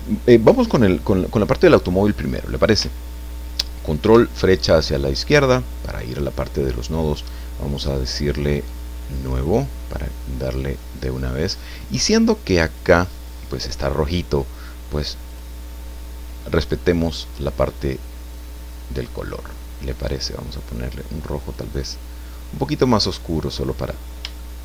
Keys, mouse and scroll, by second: 4.0 ctrl+Left, 8.6 click, 9.1 click, 10.4-11.7 drag, 12.6 click, 15.3 click, 16.9 click, 18.3-21.7 drag, 22.1-22.5 scroll down 1, 22.7 scroll down 1, 24.4 shift+middle click.